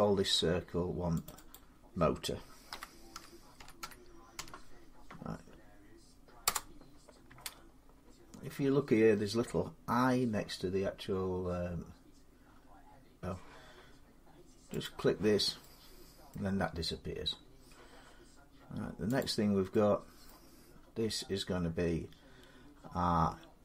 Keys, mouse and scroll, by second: 1.1 click, 1.3 click, 2.5-4.2 typing, 6.3 Return, 7.5 middle click, 9.2 middle click, 14.6 click, 16.1 middle click, 17.2 scroll up 4, 18.0-19.0 scroll down 3, 19.0 click, 20.1 middle click, 23.0 scroll down 2.